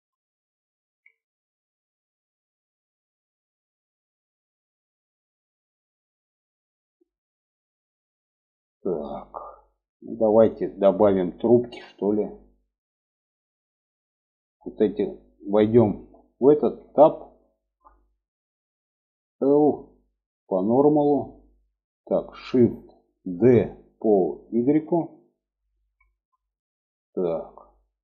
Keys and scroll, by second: 16.1 Tab, 18.6 l, 22.6 shift+d.